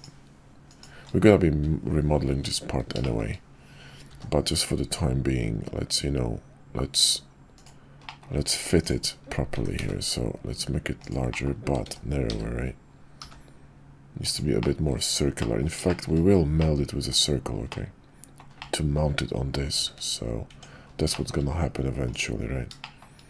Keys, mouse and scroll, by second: 2.3 `, 3.0 shift+middle click, 4.1 s, 8.1 click, 8.3 Tab, 9.5 s, 11.3 click, 11.8 s, 14.7 click, 15.5 click, 16.0 shift+click, 16.6 click, 17.7 click, 18.8 click, 19.8 `, 20.5 Tab, 21.1 shift+click, 22.8 shift+drag.